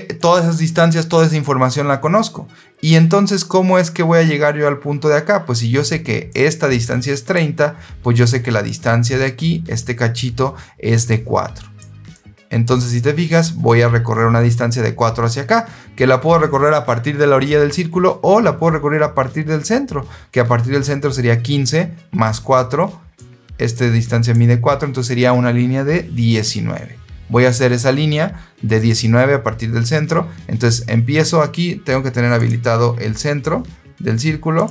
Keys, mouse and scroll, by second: 6.2-7.2 drag, 8.2 click, 8.9 click, 11.0 click, 12.0 click, 23.1 click, 23.9 click, 27.2-27.6 scroll down 2, 27.6 scroll up 2, 28.8 click, 32.3 click, 34.4 click.